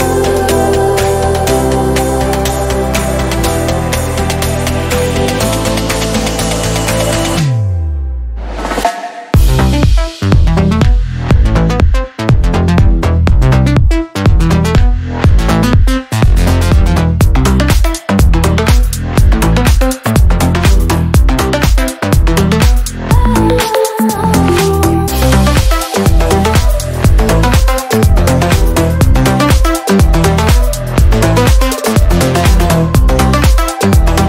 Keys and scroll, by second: 2.5 ctrl+-, 8.1 ctrl+z, 13.0 ctrl+z, 13.4 ctrl+z, 13.6 ctrl+z, 15.1 ctrl+z, 16.4 ctrl+-, 16.7 ctrl++, 17.1 ctrl+z, 17.6 ctrl+z, 19.6 ctrl+z, 21.3 ctrl+z, 25.7 ctrl+z, 27.3 ctrl+-.